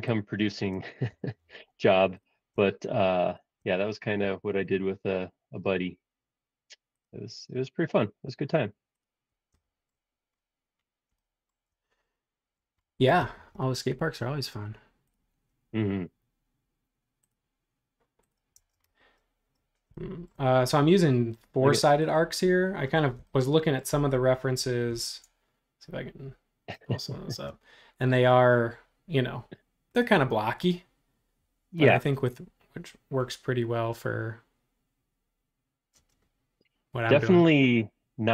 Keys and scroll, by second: 1.1 l, 4.2 a, 18.5 space, 25.1 super+Tab.